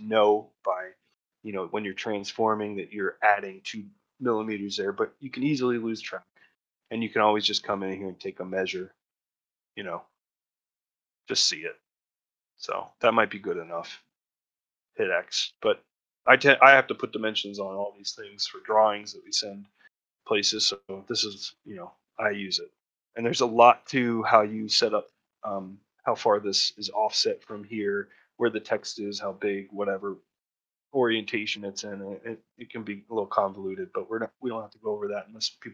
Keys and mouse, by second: 5.9 middle click, 6.4 shift+middle click, 6.8 ctrl+middle click, 9.6 click, 10.8-12.7 ctrl+drag, 14.8 ctrl+middle click, 15.4 shift+middle click, 16.4 middle click, 16.7-17.8 shift+middle drag, 18.0 middle click, 18.4 shift+middle click, 19.6 middle click, 22.0 middle click, 22.3 shift+middle click, 31.9-33.2 middle drag, 33.4 shift+middle click, 34.2 middle click, 34.7 ctrl+middle click.